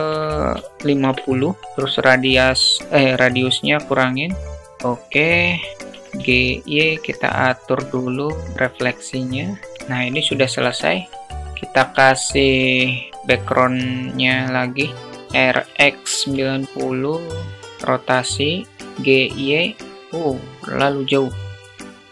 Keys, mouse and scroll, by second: 1.8-4.4 drag, 5.2 KP_0, 5.8 g, 7.2-8.5 drag, 9.1 g, 11.2 shift+a, 15.2 r, 16.8-18.9 drag, 18.9 g, 21.4 click.